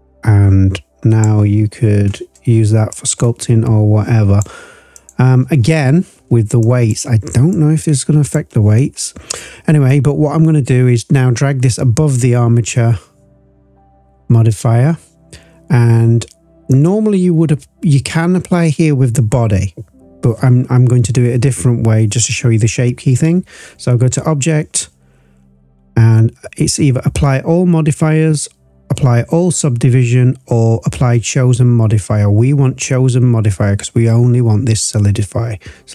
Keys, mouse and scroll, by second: 1.6-2.9 scroll down 1, 2.9 click, 4.9 click, 5.5 scroll down 1, 6.6 click, 6.6 scroll down 2, 7.5 click, 9.8-12.1 drag, 14.0-16.7 scroll down 1, 16.7-21.2 drag, 22.1-27.8 drag.